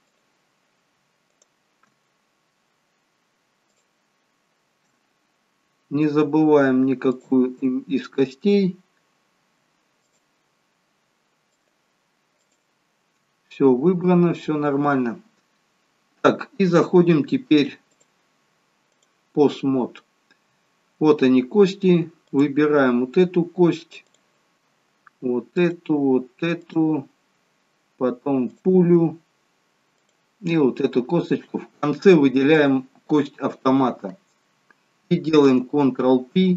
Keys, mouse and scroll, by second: 2.1 scroll up 1, 3.8 shift+click, 3.8 scroll up 1, 5.0 scroll down 2, 7.1 shift+click, 8.2-8.7 scroll up 6, 10.1 shift+click, 11.6 shift+click, 14.7 scroll down 5, 17.9 click, 20.0-20.6 scroll down 2, 22.3 click, 24.1 click, 25.5 shift+click, 26.6 shift+click, 35.4 ctrl+p.